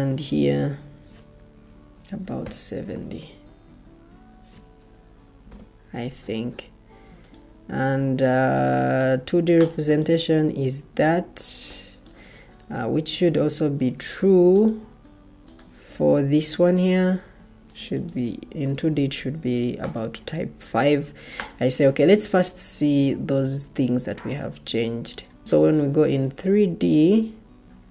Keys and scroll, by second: 2.0-2.7 typing, 5.3 typing.